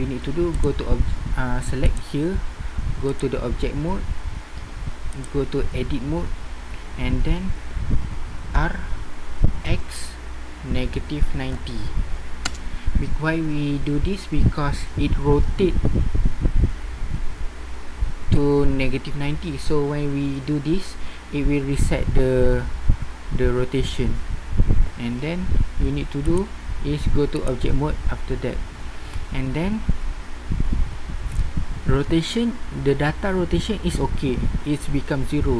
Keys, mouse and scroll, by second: 0.5-1.5 drag, 1.5-2.0 typing, 5.3 typing, 8.5 r, 15.6 typing, 26.4-27.5 typing.